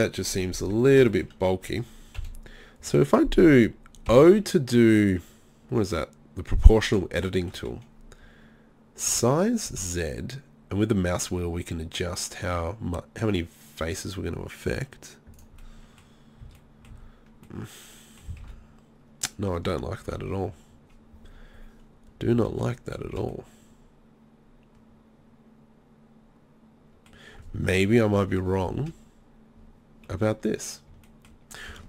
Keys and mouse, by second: 2.2 KP_3, 4.1 o, 7.4 click, 9.1 s, 15.4-18.4 drag, 16.4 z, 16.9 z, 18.4 ctrl+z, 20.1 KP_3, 22.4 z, 23.1 z, 28.0 KP_3, 28.8 z, 30.1 z.